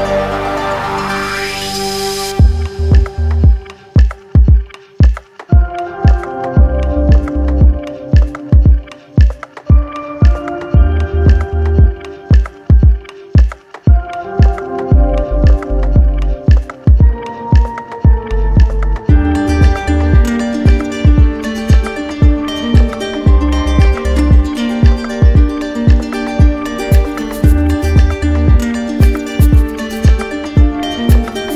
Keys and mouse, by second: 0.5 right click, 1.4 shift+click, 2.0 shift+click, 3.8 shift+click, 4.8 right click, 5.6 right click, 7.0 click, 10.5 shift+click, 11.8 shift+click, 12.7-14.3 shift+drag, 14.6 right click, 16.3 alt+right click, 17.8 alt+right click, 18.5 alt+right click, 19.7 alt+right click, 20.6 shift+right click, 21.7 right click, 23.6 right click, 24.6 alt+right click, 25.8 alt+right click, 27.6 right click, 28.3 right click, 29.7 click, 30.8 shift+right click.